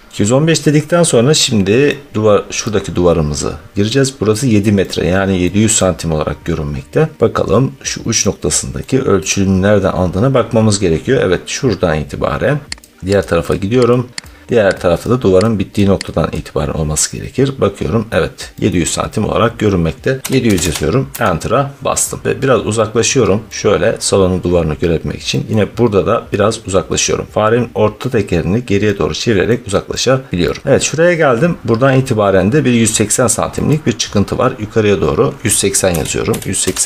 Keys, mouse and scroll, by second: 1.2 middle click, 2.3-3.6 scroll, 5.3 scroll, 7.2 scroll, 8.7 scroll, 9.3-10.7 scroll, 12.0-12.6 scroll, 13.0 click, 13.4 click, 14.1 click, 14.4 click, 14.9 click, 15.6 click, 16.2 click, 17.1-17.9 scroll, 18.6-19.3 scroll, 20.1 scroll down 1, 20.2 typing, 21.0 Return, 22.3-22.9 scroll, 23.0 middle click, 23.9 middle click, 25.4 middle click, 25.8 middle click, 25.9-29.0 middle click, 26.0-27.0 scroll, 28.0 scroll, 30.3-31.2 scroll, 31.9 scroll down 7, 33.7-34.0 scroll, 35.8-36.5 typing, 36.3 scroll.